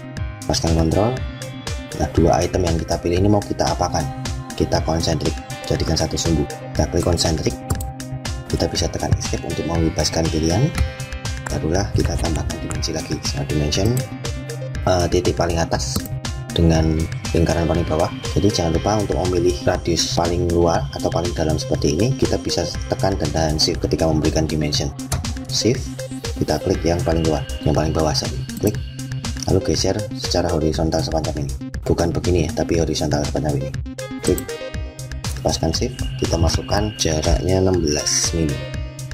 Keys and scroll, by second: 9.1 Escape.